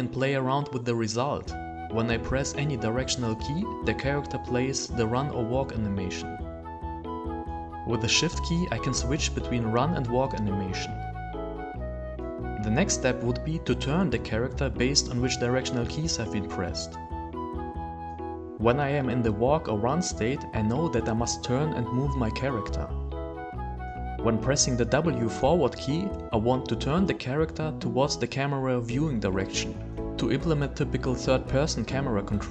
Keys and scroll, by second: 0.7 w, 2.3 d, 3.5 w, 5.1 w, 12.8 w, 14.6 w.